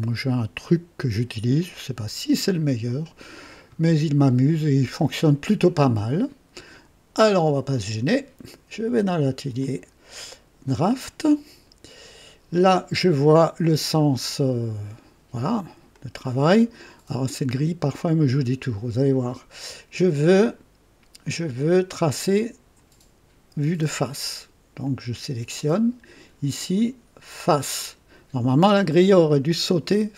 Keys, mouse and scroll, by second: 0.6 right click, 1.6-3.1 drag, 10.8 click, 15.9-16.8 drag, 24.8 click, 25.5 click, 27.5 click, 29.4 click.